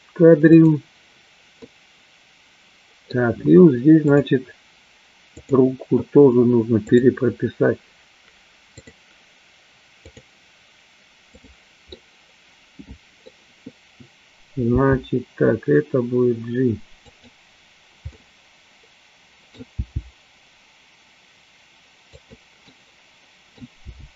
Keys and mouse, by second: 1.2 click, 1.7-3.2 middle drag, 4.2 click, 5.6 click, 10.1 click, 11.5 click, 12.1-13.4 middle drag, 15.2 g, 18.2-19.6 middle drag, 20.1 g, 22.5 click, 22.8 middle click.